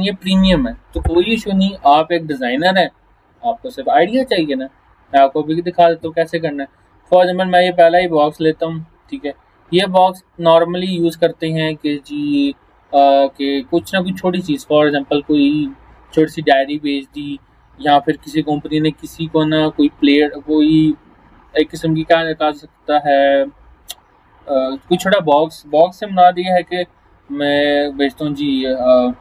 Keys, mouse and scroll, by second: 5.0-5.4 scroll down 1, 7.8 click.